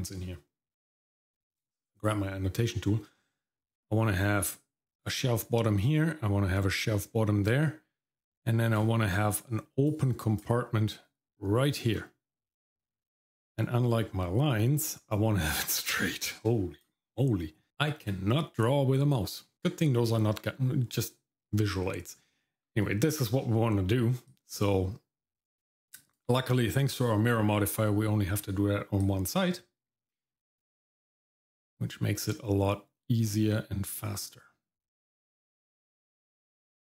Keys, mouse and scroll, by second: 1.5 click, 3.7-5.0 drag, 5.9-6.9 drag, 8.3 click, 9.1 click, 10.0 click, 10.9 click, 12.9-14.0 scroll up 1, 14.2 middle click, 16.0 click, 17.7 click, 18.3-18.9 scroll down 1, 24.3-26.1 ctrl+drag, 29.0-36.8 ctrl+drag.